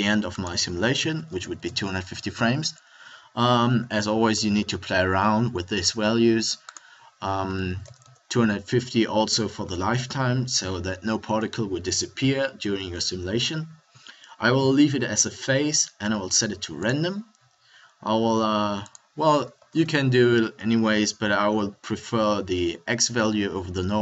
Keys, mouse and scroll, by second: 18.7 middle click.